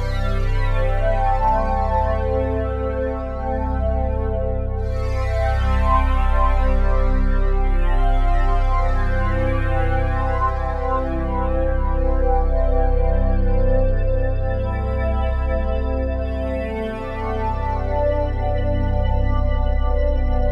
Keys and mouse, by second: 0.2 click, 0.7 g, 1.5 click, 2.2 click, 2.3 g, 3.4 click, 4.3 click, 6.2 click, 6.8-10.0 alt+drag, 10.2 alt+shift+click, 10.6 ctrl+alt+click, 12.5 click, 13.3 7, 14.1 alt+shift+click, 14.8 ctrl+alt+click, 15.6-18.1 ctrl+alt+drag, 18.1 g, 18.4 z, 19.5 click, 20.2 7.